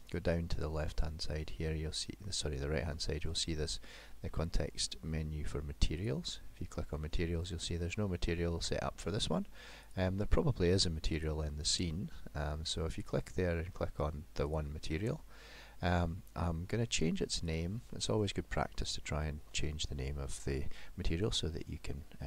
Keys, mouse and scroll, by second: 6.0 click, 9.9 click, 17.5 click.